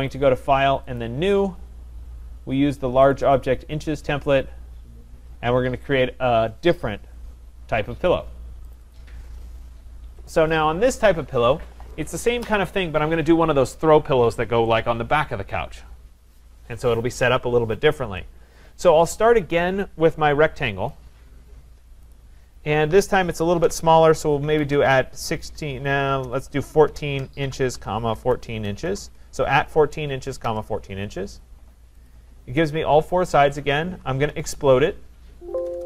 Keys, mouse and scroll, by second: 0.1 click, 1.0 click, 3.1 click, 3.4 click, 8.8 click, 8.9 click, 9.6-10.9 scroll, 10.9-14.0 scroll, 20.9 click, 22.2 click, 23.6-24.8 typing, 26.2-28.9 typing, 30.5 Return, 32.1 click, 34.2-35.8 typing.